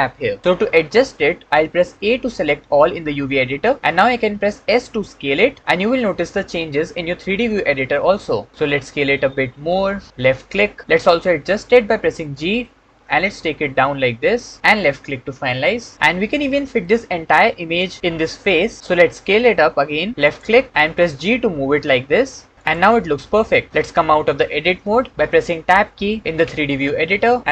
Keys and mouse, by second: 1.9 a, 4.7 s, 10.2 click, 12.0 g, 18.8 s, 20.1 click, 20.9 g, 26.5 Tab.